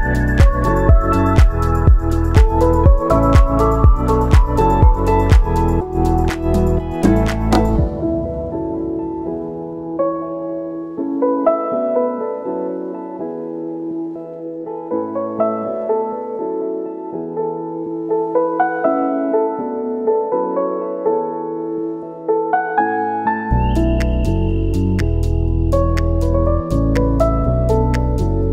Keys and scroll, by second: 2.3 1, 2.5 Return, 5.1-6.0 typing, 18.5 ctrl+s, 24.5 Delete, 25.4 ctrl+c, 26.6 ctrl+c, 27.4 ctrl+v, 28.4 ctrl+v.